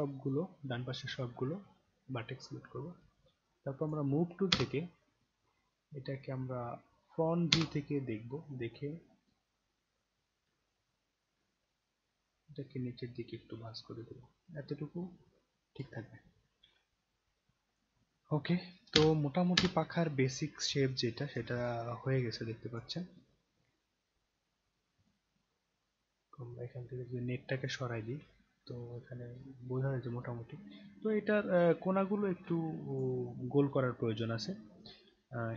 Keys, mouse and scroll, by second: 3.8 click, 4.5 space, 7.5 space, 8.7-10.3 scroll up 3, 10.6-11.3 alt+middle drag, 12.3-15.8 drag, 17.7 click, 18.9 space, 19.6 space, 20.8-21.3 alt+drag, 21.6 click, 22.5-22.8 alt+drag, 23.2-24.7 right drag, 25.0 click, 25.6 scroll up 1, 27.6 click, 28.3-31.6 alt+drag, 31.8 alt+right click, 32.9 click, 34.4-35.0 scroll up 2, 35.4 scroll down 2.